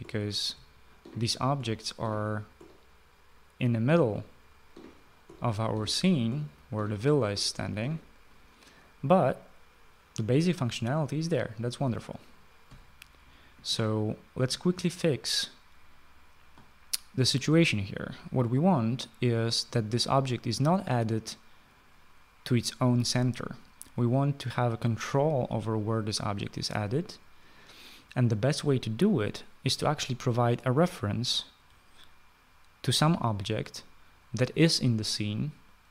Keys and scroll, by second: 0.0-2.8 typing, 4.3-8.4 typing.